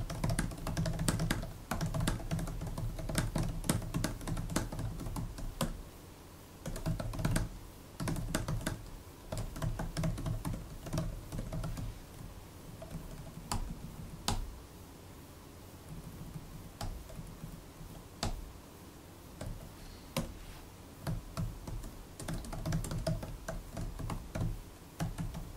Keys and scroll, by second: 0.0-12.1 typing, 12.3 alt+Left, 12.4 alt+Left, 12.5 alt+Left, 13.0 alt+Right, 13.2-14.0 typing, 15.7-16.4 typing, 17.0 alt+Right, 17.3 alt+Right, 17.6 alt+Right, 18.2 `, 19.3 super+Right, 20.0 Return, 21.1-25.5 typing.